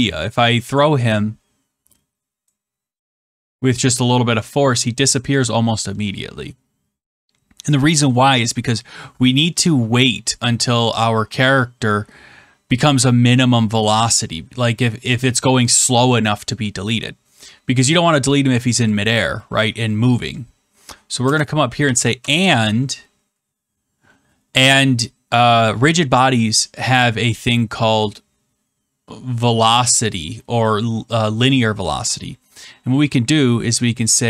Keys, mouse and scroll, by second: 2.4 click, 5.3 click, 18.9 click, 21.8 shift+7, 21.9 shift+7.